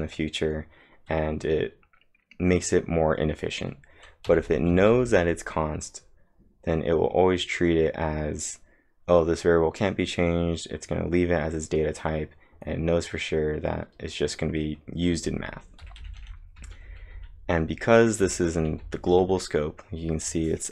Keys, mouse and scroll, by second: 4.3 typing, 15.8 typing, 18.0-18.7 typing.